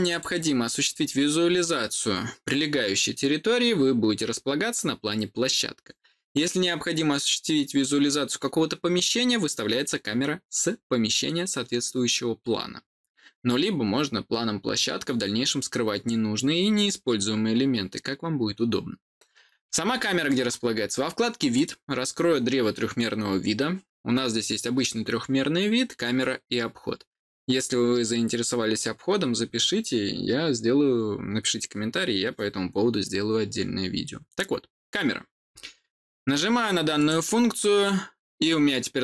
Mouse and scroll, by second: 0.0 click, 21.5 click, 36.9 click.